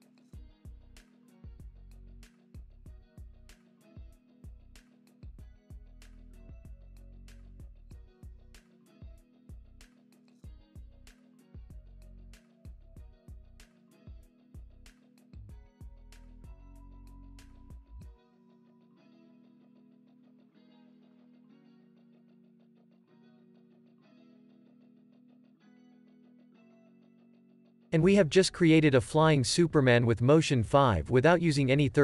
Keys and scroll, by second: 0.4 Up, 1.8 Down, 5.4 super+d, 17.9 Right, 18.6 Right, 19.2 Right, 20.1 space.